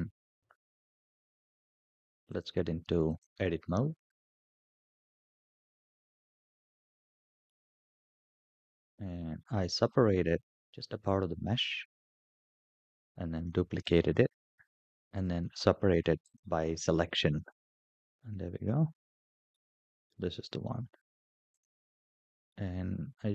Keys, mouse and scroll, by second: 0.1 click, 2.1-3.0 drag, 4.5 KP_Decimal, 5.3-5.8 scroll down 5, 6.2-7.3 middle drag, 7.8-8.8 scroll up 11, 9.7 scroll up 3, 10.5 shift+middle click, 10.5 scroll up 1, 10.7 scroll down 3, 11.8 scroll down 3, 13.2 shift+d, 15.0 p, 17.8 click, 18.3-19.3 scroll down 5, 19.8 scroll down 1, 21.3 click, 21.5-23.3 drag.